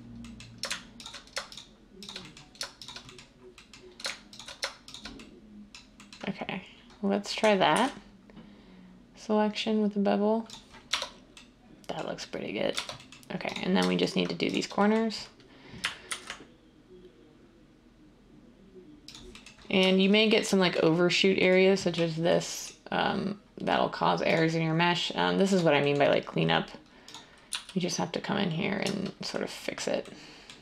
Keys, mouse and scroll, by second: 7.7 ctrl+b, 10.9 Tab, 12.8 Tab, 16.1 ctrl+b, 27.5 z.